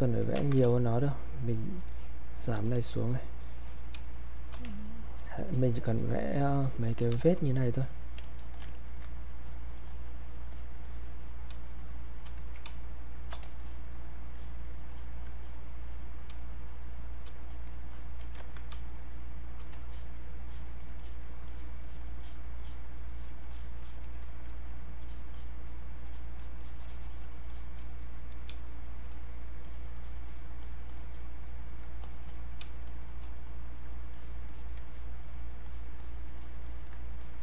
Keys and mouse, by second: 0.3 ctrl+z, 0.7 space, 1.0 click, 1.2 space, 2.7 click, 3.0 alt+click, 4.0 space, 4.3 click, 4.4 space, 4.8 alt+click, 5.5 click, 5.9 alt+click, 7.5 alt+click, 8.4 alt+click, 8.7 ctrl+alt+right click, 9.4 ctrl+click, 10.9 click, 11.6 space, 11.9 click, 12.1 space, 12.7 space, 13.6 alt+click, 16.4 space, 16.7 click, 16.9 space, 17.5 click, 18.4 ctrl+z, 18.8 space, 19.3 click, 19.7 space, 19.9 alt+click, 21.5 alt+click, 26.1 alt+click, 28.5 space, 28.8 click, 32.3 click, 32.6 space, 33.0 click, 33.1 space, 33.5 click, 34.1 alt+click, 37.2 alt+click.